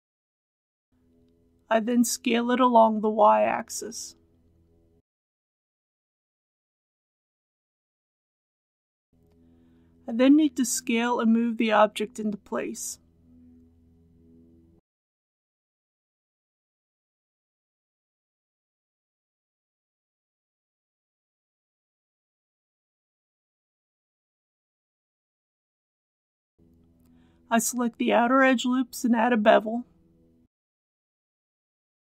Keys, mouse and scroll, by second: 1.5 s, 2.2 y, 7.1 click, 11.6 alt+s, 14.6 click, 15.9 g, 16.2 z, 20.5 shift+click, 21.2-23.1 middle drag, 23.1 shift+middle click, 25.6 2, 27.6 alt+click, 29.2 alt+click, 30.8 alt+shift+click, 31.2 middle click.